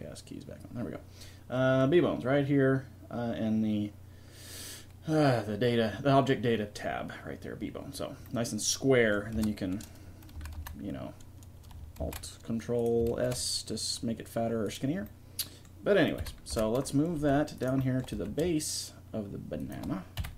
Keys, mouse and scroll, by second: 8.3 middle click, 9.4 Tab, 10.4 a, 10.6 a, 12.0 alt+s, 13.1 ctrl+alt+s, 16.2 KP_1, 16.5 Tab, 17.2 g, 18.2 g, 20.2 KP_3.